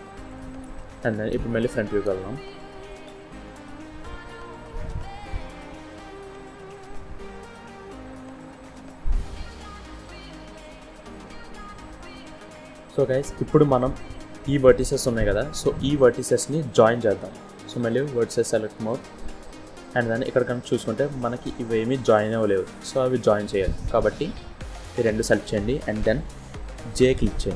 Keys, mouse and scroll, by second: 0.1 click, 1.2 KP_1, 2.9 z, 4.0 scroll up 2, 4.7 scroll up 2, 5.1 shift+middle click, 6.4-7.9 scroll down 1, 7.9 scroll down 1, 8.7 middle click, 10.8 z, 12.2 middle click, 12.4 click, 12.4-12.7 scroll down 3, 12.7 middle click, 13.6-14.5 scroll up 1, 14.6 click, 16.7 click, 18.7 click, 19.4-19.7 scroll up 1, 19.8 shift+middle click, 20.9 click, 22.7 click, 24.0 click.